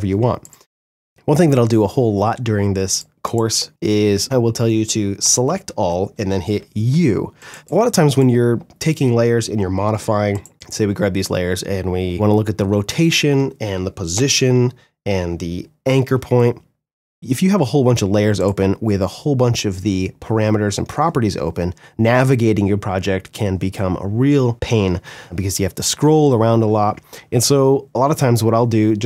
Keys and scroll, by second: 4.3 ctrl+a, 5.7 u, 12.1 r, 13.3 shift+p, 14.9 shift+a, 16.7 ctrl+d, 17.2 shift+r.